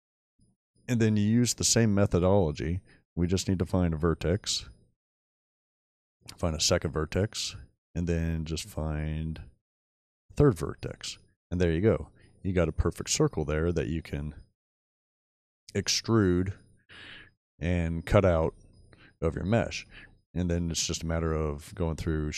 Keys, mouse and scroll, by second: 18.8 shift+middle click, 20.3 shift+middle click.